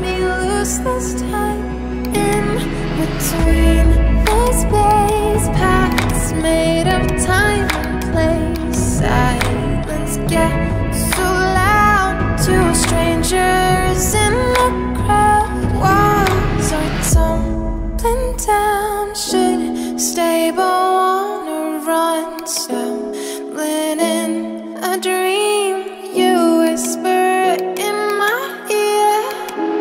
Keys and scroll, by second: 3.1 2, 3.4 0, 3.7 Return.